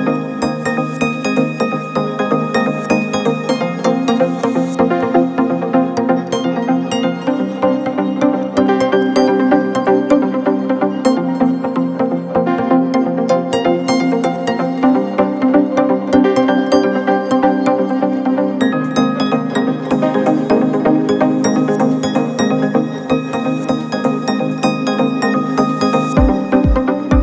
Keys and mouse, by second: 1.3 Tab, 2.6 middle click, 4.1 1, 4.6 click, 5.0 middle click, 6.7 click, 7.4-9.5 middle drag, 10.0 shift+middle click, 11.6 2, 12.0 click, 14.3 shift+s, 16.2 shift+click, 17.3 click, 17.6 middle click, 18.6 Tab, 19.3 click, 19.9 shift+a, 23.3 s, 25.8-26.8 middle drag.